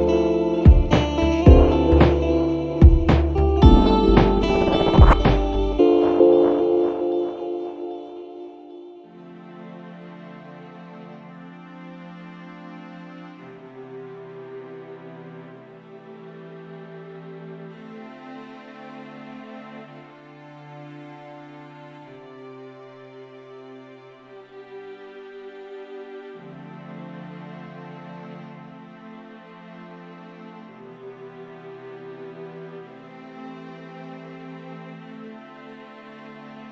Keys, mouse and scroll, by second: 0.6 click, 2.0 a, 2.3 n, 4.4 click, 5.4 click, 6.0 click, 7.2-7.7 scroll down 1, 8.0 scroll up 1, 8.9 scroll up 1, 10.9-12.1 scroll up 4, 12.5-13.3 scroll up 2, 13.6-14.2 scroll up 2, 14.5-15.1 scroll up 2, 15.2 scroll up 2, 16.1-16.7 scroll down 2, 16.9-17.3 scroll up 2, 18.1-18.6 scroll up 2, 18.7-19.2 scroll up 2, 19.8-20.1 scroll up 2, 20.8-21.2 scroll down 2, 21.5-21.9 scroll down 2, 22.0-22.8 scroll down 4, 23.0 scroll down 2, 23.7 click, 24.4 0, 25.8 click.